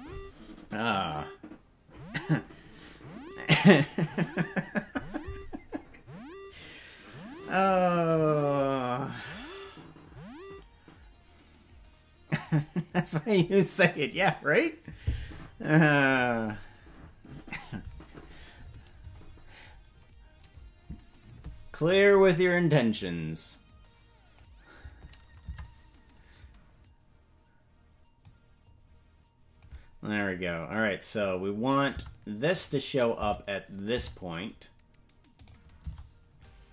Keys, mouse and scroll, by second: 19.6-20.4 scroll up 1, 22.6-24.3 drag, 22.6 scroll up 1, 25.4 Tab, 28.2-29.6 drag, 30.3-30.8 scroll up 3, 31.9 Tab, 32.5-35.5 drag, 35.8 Tab.